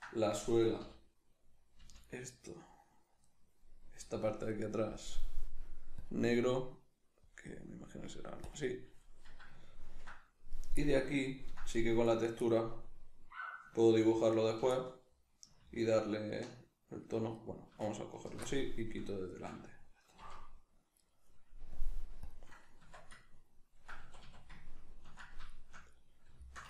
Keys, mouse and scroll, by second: 0.3 right click, 0.8 l, 5.1-9.6 drag, 9.6 ctrl+middle click, 10.5 right click, 10.8-12.0 middle drag, 12.0 right click, 12.5-13.9 middle drag, 13.9 ctrl+right click, 14.4 ctrl+right click, 14.8-15.8 middle drag, 15.8 ctrl+right click, 17.4 alt+right click, 17.8 alt+shift+right click, 18.1 alt+shift+right click, 18.5-20.2 middle drag, 20.2 c, 21.1 right click, 21.8-23.3 drag, 22.8 Tab, 23.3-26.6 ctrl+middle drag, 24.0 a.